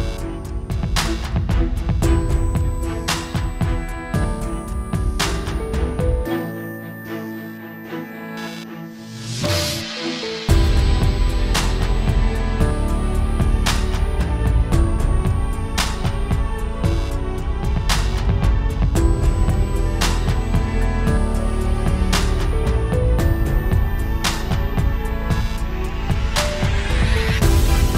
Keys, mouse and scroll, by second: 2.0 alt+a, 2.0 r, 2.1 scroll down 5, 2.2 middle click, 2.4 scroll down 1, 2.5 shift+middle click, 2.6 scroll up 1, 2.7 middle click, 3.3-3.8 scroll up 2, 3.6 click, 3.8 scroll down 4, 3.9 scroll up 1, 4.0 alt+a, 4.1 scroll down 2, 4.2 scroll up 1, 5.0 ctrl+space, 10.3-10.8 scroll down 8, 10.8 scroll up 10, 11.3 click, 11.4 scroll up 1, 11.6 middle click, 11.9 shift+middle click, 12.0 scroll up 5, 12.3 middle click, 12.4 scroll down 1, 12.6 shift+middle click, 12.7-13.3 scroll up 1, 13.3 middle click, 13.6 shift+middle click, 13.7-14.6 scroll down 5, 13.8 middle click, 14.1 middle click, 15.0 r, 15.2-15.9 scroll up 2, 15.9 click, 16.1 KP_0, 20.2 click, 20.3 scroll down 2, 20.5 shift+middle click, 20.8-21.2 scroll up 1, 24.9 middle click, 25.1 alt+a, 25.2 shift+middle click, 25.4 middle click, 25.5 scroll down 2, 25.7 shift+middle click, 25.8 scroll up 2, 26.2 middle click, 26.4 scroll down 1, 26.5 scroll up 1, 26.7 middle click, 26.8 click, 27.1 middle click.